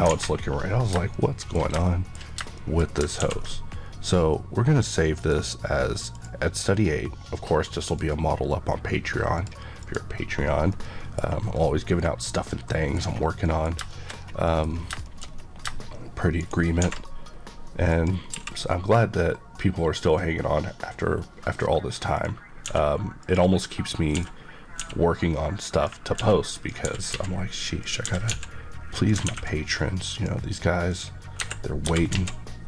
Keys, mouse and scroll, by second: 0.0 alt+a, 0.6-1.0 scroll down 1, 1.0 middle click, 1.8 middle click, 3.1 ctrl+s, 5.1 click, 6.1 click, 7.8 click, 19.7 click, 22.1 click, 22.6-24.7 typing, 23.1 click, 24.0 middle click, 25.7 click, 26.2-28.2 typing, 26.5 click, 27.7 click, 28.9 click, 30.0 click, 31.3 click, 31.4 Escape, 31.8 typing.